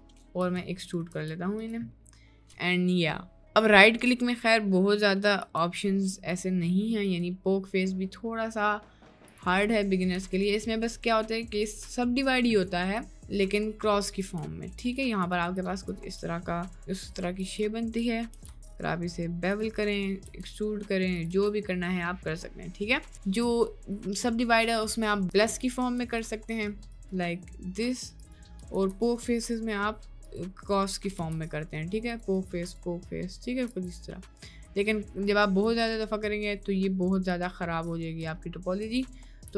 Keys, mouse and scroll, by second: 0.1 middle click, 0.5 e, 0.9 click, 1.2 Tab, 1.7 drag, 2.0-2.7 middle drag, 3.6 click, 5.4 Tab, 5.9 middle click, 6.7 middle click, 7.4-9.6 right drag, 10.8 middle click, 11.3 shift+middle click, 11.8 middle click, 12.6 shift+click, 15.3 shift+click, 16.9 2, 17.4 click, 18.3 ctrl+b, 19.9 middle click, 20.4 e, 21.5 Tab, 22.0-22.6 middle drag, 22.8 middle click, 22.9 click, 25.2 Tab, 25.4 Tab, 25.6 click, 25.8 Tab, 26.2 click, 26.6 right click, 26.8 3, 27.0-28.3 right drag, 28.8 ctrl+z, 29.3-30.4 right drag, 31.2 ctrl+z, 31.8 right click, 32.2 middle click, 32.4 right click, 33.9 middle click, 34.3 middle click, 35.6 right click, 38.8 ctrl+z, 39.3 ctrl+z, 39.4 ctrl+z.